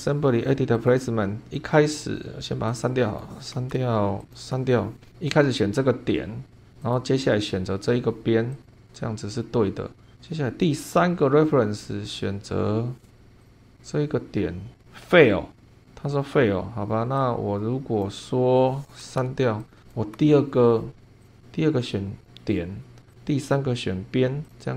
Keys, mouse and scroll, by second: 0.7 click, 2.7 click, 3.6 BackSpace, 4.2 click, 4.4 BackSpace, 5.0 scroll up 1, 6.8 click, 8.5 click, 9.1-9.6 scroll up 1, 10.8 click, 13.4 click, 17.2 click, 19.0 BackSpace, 19.6 click, 20.0 BackSpace, 21.2 click, 22.2 click, 23.1 click, 24.4 click.